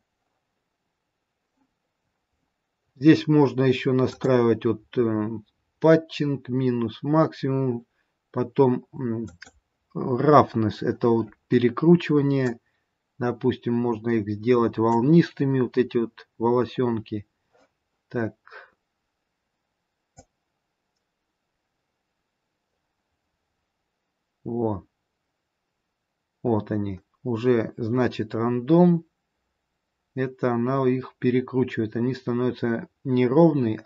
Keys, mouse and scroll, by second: 1.9-3.1 scroll down 5, 4.0 click, 4.0-5.3 scroll down 2, 9.2 click, 10.3-12.2 scroll down 4, 13.5 click, 16.2-17.0 scroll up 1, 17.0-19.8 scroll up 2, 20.0 click.